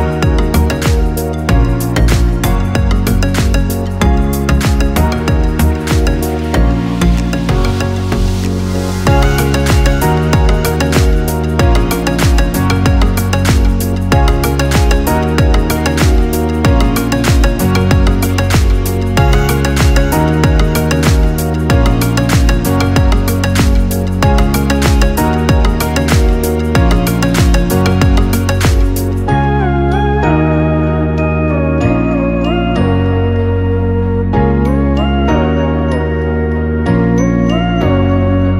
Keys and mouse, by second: 2.2 g, 9.2-12.8 middle drag, 12.8 click, 14.4 click, 15.4 shift+click, 16.3 f, 17.6-19.2 ctrl+middle drag, 19.2 click, 20.8 shift+click, 21.9 f, 23.9 shift+click, 24.7 shift+click, 25.6 f, 28.2-28.7 ctrl+KP_8, 30.0-31.6 ctrl+middle drag, 31.6 click, 35.1 click, 37.4 x.